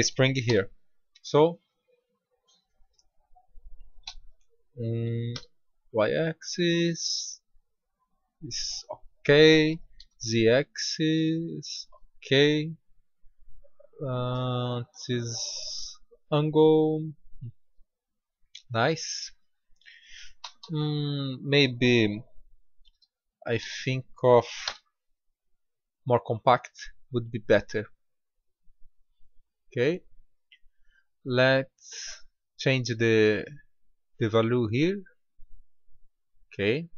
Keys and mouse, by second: 0.4 g, 9.9 g, 12.6-14.4 drag, 18.2 middle click, 20.3 s, 31.4-34.8 drag, 35.3-36.9 middle drag.